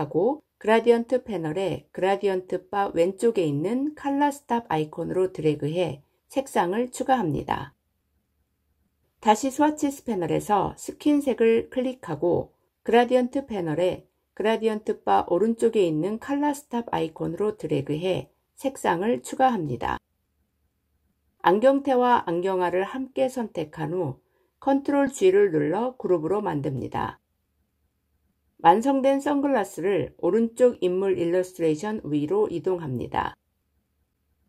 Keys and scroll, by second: 24.6 ctrl+g.